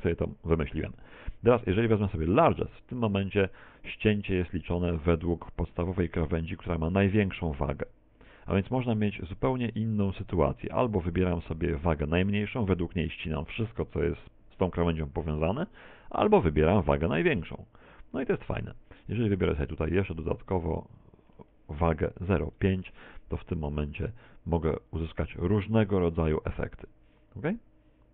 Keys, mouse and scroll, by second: 6.3 click, 13.3 click, 20.2 click, 22.3 right click, 24.6 click.